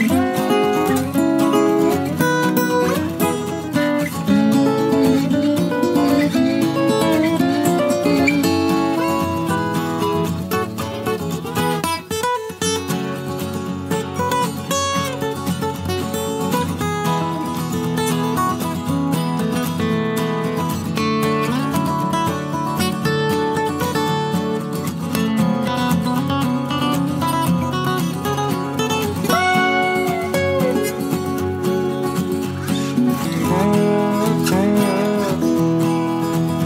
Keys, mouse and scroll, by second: 1.3 click, 2.4 click, 2.5 space, 3.9 space, 7.1 click, 9.2 click, 11.5 F1, 12.0 click, 13.4 click, 14.5 KP_Subtract, 15.8 space, 18.1 click, 19.8 click, 21.3 click, 23.3 click, 24.9 click, 25.2 space, 28.2 KP_Subtract, 30.1-31.4 drag, 33.4 click, 36.4 click.